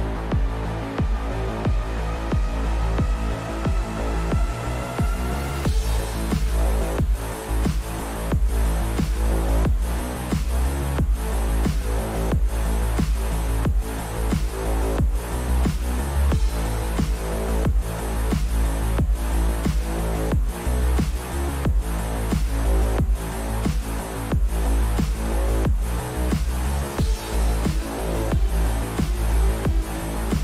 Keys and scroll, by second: 1.8-3.5 typing, 5.0 F2, 5.7-7.8 typing, 8.1 Return, 11.1 q, 16.0-17.1 typing, 24.3-25.6 typing.